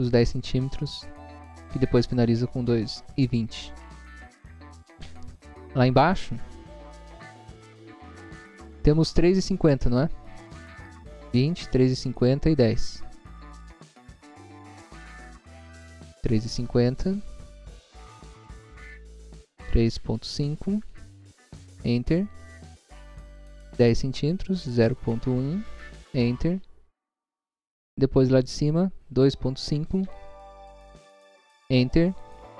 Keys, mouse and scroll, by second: 5.1 scroll up 1, 6.7 Left, 7.5 Right, 13.7 click, 15.7 click, 19.2 3, 20.7 ., 21.4 5, 21.7 Return, 23.3 click, 24.8-25.7 typing, 26.1 Return, 28.4 click, 29.9 2, 30.5 ., 31.4 5, 31.6 Return.